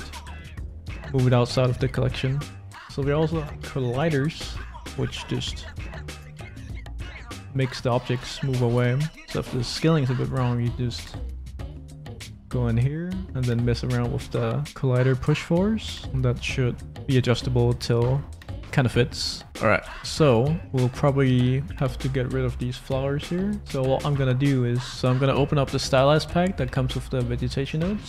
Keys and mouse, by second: 4.4 middle click, 5.0 s, 8.6 s, 9.2 s, 10.3 click, 14.6-16.7 middle drag, 17.5 click, 17.9 middle click, 18.2 middle click, 18.6 click, 19.0 click, 19.8 x, 20.5 middle click, 21.7 middle click.